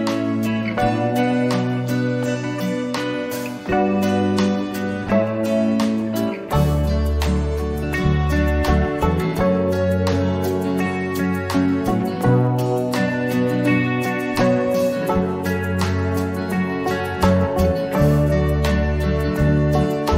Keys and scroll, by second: 2.4 ctrl+-, 2.8 ctrl+-.